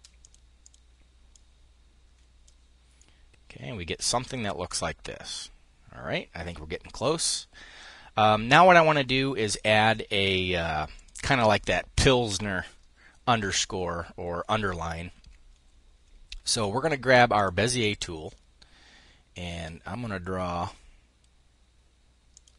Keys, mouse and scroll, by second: 2.4-4.2 drag, 10.9-12.2 drag, 16.8 click, 21.8-22.5 drag.